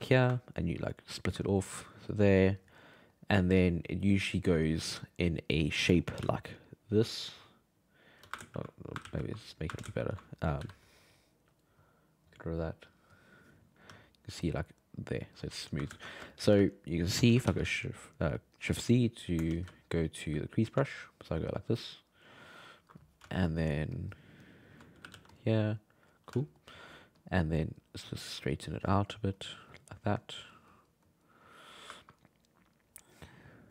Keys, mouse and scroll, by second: 0.6-2.9 ctrl+drag, 2.9 middle click, 3.6 click, 4.4 middle click, 5.4 alt+middle click, 6.2 d, 6.4 d, 6.5 d, 6.6-8.2 drag, 8.2 d, 8.4 ctrl+z, 9.0 ctrl+z, 9.8 ctrl+shift+z, 10.6 n, 11.5 click, 12.3-13.9 drag, 13.9 d, 14.1-15.4 drag, 15.4-17.4 typing, 15.9 ctrl+z, 16.3 shift+middle click, 17.8-19.5 middle drag, 19.5 shift+c, 20.9-23.3 ctrl+drag, 23.3 alt+middle click, 23.9 alt+middle click, 25.0 g, 25.1 f, 25.6 click, 26.4 alt+middle click, 27.2-31.9 drag, 31.9-33.7 ctrl+middle drag.